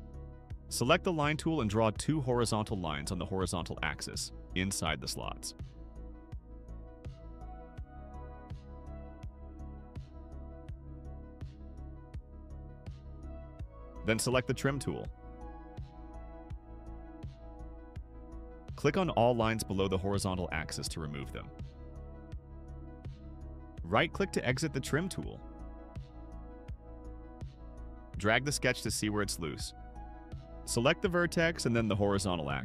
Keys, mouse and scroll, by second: 4.0 click, 4.7 scroll up 2, 5.1 right click, 5.6 scroll up 2, 6.5 click, 8.2 click, 9.8 click, 11.9 click, 13.1 right click, 18.0 click, 19.2 click, 19.8 click, 20.6 click, 21.4 click, 22.1 click, 23.0 click, 24.8 right click, 29.3 click, 30.2 click, 31.5 click, 32.5 click.